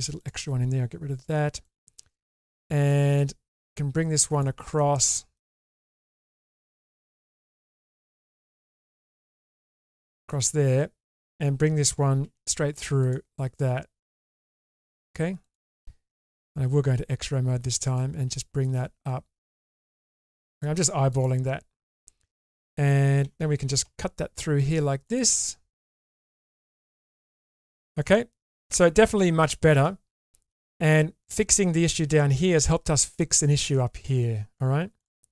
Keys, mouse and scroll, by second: 0.2 click, 1.2 ctrl+x, 1.6 middle click, 2.9 middle click, 4.8 middle click, 6.4 ctrl+click, 6.8 middle click, 7.5 middle click, 9.2 g, 12.2 ctrl+r, 16.3 alt+z, 16.9 click, 18.0 middle click, 19.2 click, 19.4-20.6 drag, 23.3 alt+z, 23.8 k, 27.5 shift+middle click, 28.0-29.2 middle drag, 29.4 shift+middle click, 30.3 middle click, 33.1 middle click.